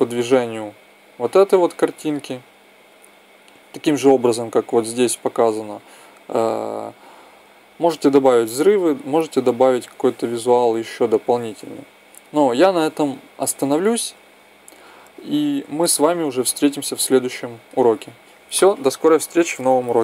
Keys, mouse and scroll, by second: 2.5-4.3 drag, 5.4-7.0 drag.